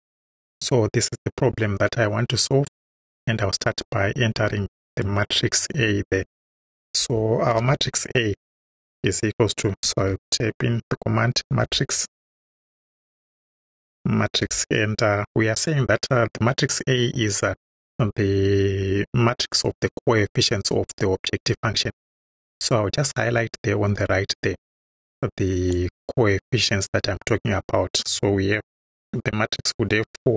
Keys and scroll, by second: 7.6 shift+a, 8.7 =, 9.9 m, 10.1 a, 11.3-14.3 typing.